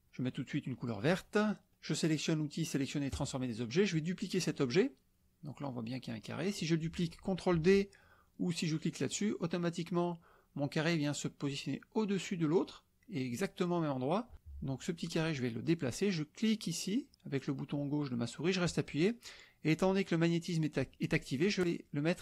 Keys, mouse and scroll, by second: 0.8 click, 3.1-3.4 drag, 8.8 click, 17.1-21.6 drag.